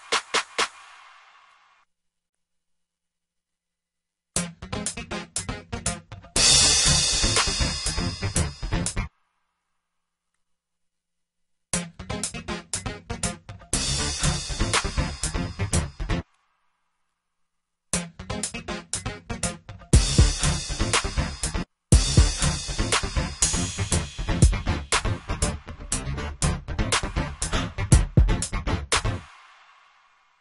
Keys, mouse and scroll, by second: 5.5 F1, 10.3 ctrl+l, 10.8-11.3 drag, 13.3 alt+w, 13.8 Return, 14.0 Escape, 15.2 F1, 15.5 F1.